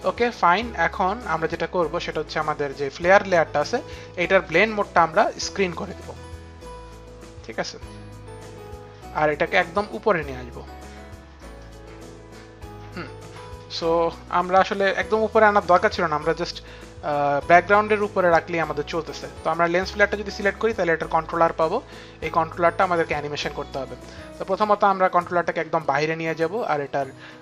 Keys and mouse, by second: 0.8 click, 3.7 click, 5.4 click, 11.2 click, 15.6 click, 20.8 click, 24.1 click.